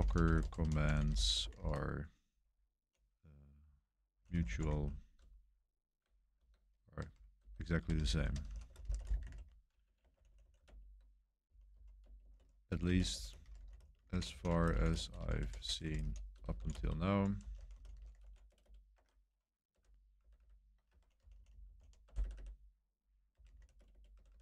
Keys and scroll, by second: 0.0-2.0 typing, 3.7-24.4 typing, 10.6 super+Return.